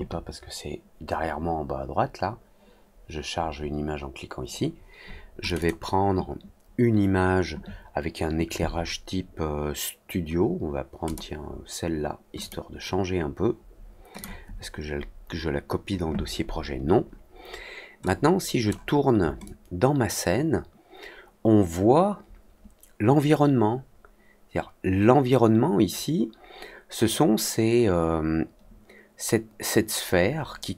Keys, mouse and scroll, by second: 5.4 click, 5.5 click, 11.0 click, 12.3 click, 14.1 click, 18.0 click, 19.4-30.7 alt+drag.